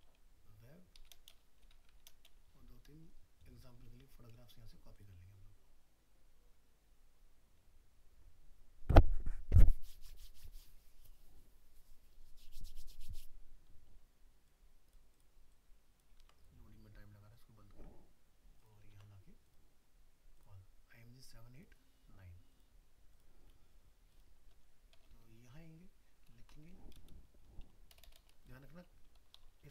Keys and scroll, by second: 16.2 ctrl+c, 18.9 ctrl+v, 26.4 shift+Right.